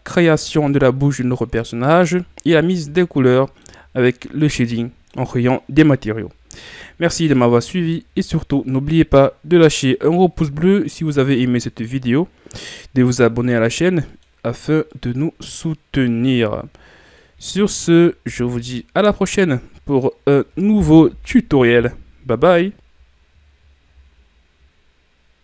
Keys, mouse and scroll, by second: 0.1-7.8 middle drag, 8.5-9.9 right drag, 9.9 click, 10.9-12.3 middle drag, 12.3 scroll up 1, 13.4-14.1 scroll down 2, 14.1 middle click, 14.5-14.9 scroll down 1, 14.9-17.2 middle drag, 17.2 drag, 18.3 a, 18.5-21.1 middle drag, 21.1 KP_1.